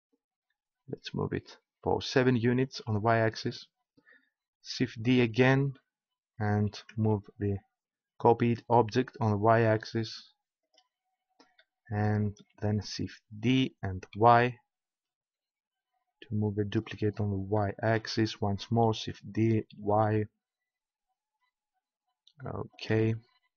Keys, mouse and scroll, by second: 2.9-5.0 drag, 5.0 shift+d, 10.6-13.4 drag, 13.4 shift+d, 14.9-16.6 middle drag, 16.6-18.5 drag, 19.0 shift+d, 20.2-21.5 middle drag, 22.9-23.5 drag.